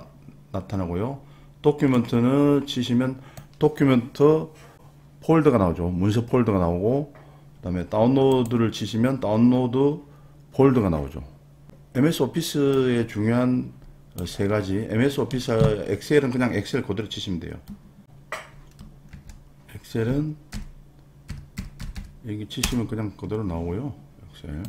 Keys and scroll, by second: 19.1 super+r, 20.5-22.4 typing, 22.7 Return.